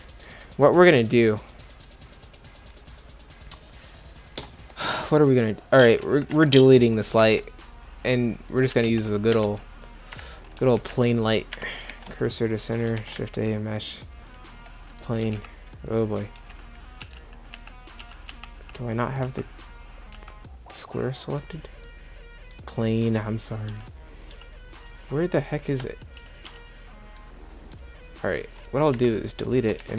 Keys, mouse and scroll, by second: 6.3 Delete, 7.2 shift+a, 8.7 g, 10.1 Delete, 10.8 shift+s, 11.9 shift+s, 13.0 shift+a, 15.2 h, 15.3 z, 16.4-20.1 typing, 23.7 g, 24.3 g, 25.7 Escape, 26.2 n, 26.5 n, 28.9 Delete, 29.8 shift+a.